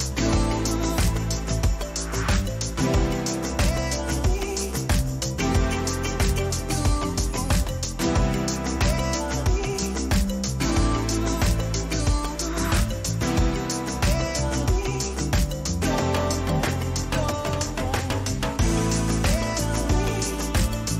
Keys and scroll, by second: 6.6 Return, 8.3 ctrl+t, 14.6 Return, 16.2 ctrl+j, 16.8 ctrl+t, 20.6 Return.